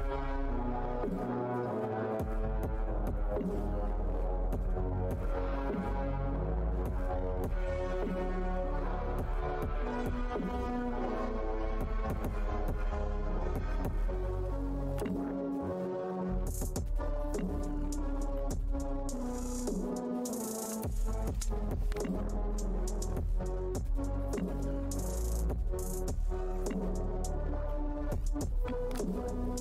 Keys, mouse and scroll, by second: 0.9 scroll down 1, 2.3 scroll down 1, 3.1 scroll down 1, 3.8 scroll down 1, 5.7 scroll down 1, 7.1 scroll down 1, 8.3 scroll down 1, 10.2-10.8 scroll down 1, 14.8 scroll down 1, 15.7 scroll down 1, 20.2 Tab, 20.2 scroll down 1, 22.7 ctrl+Tab, 26.3 scroll down 1.